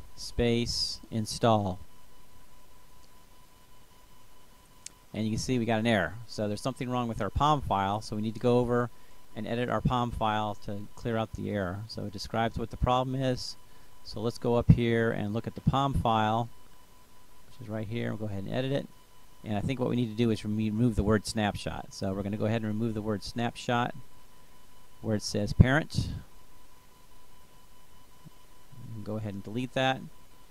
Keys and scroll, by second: 0.0-1.8 typing, 2.2 Return, 30.4 BackSpace.